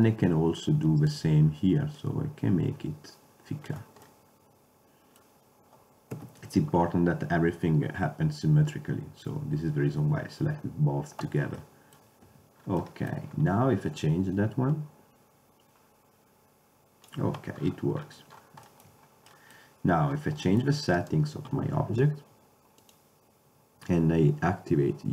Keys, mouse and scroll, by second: 2.1-3.6 middle drag, 3.6 click, 3.9 middle click, 6.2 KP_7, 11.7 middle click, 12.4 Tab, 14.5 click, 15.9 click, 17.7 middle click, 18.1-18.5 middle drag, 21.2-22.5 right drag, 22.5-22.9 middle drag, 22.9-24.8 drag.